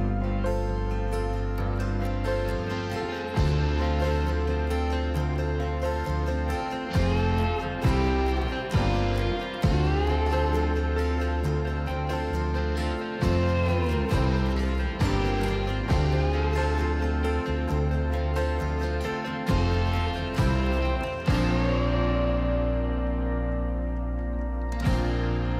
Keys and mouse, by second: 1.0 click, 2.4-2.9 drag, 4.1 shift+middle click, 8.9 s, 9.2 x, 14.9 click, 16.5 alt+s, 17.0 alt+s, 17.1 alt+s, 18.6 ctrl+z, 24.5 s.